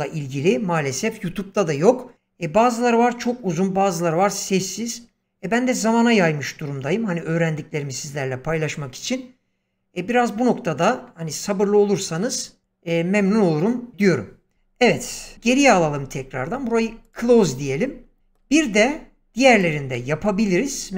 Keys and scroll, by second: 15.3 ctrl+z.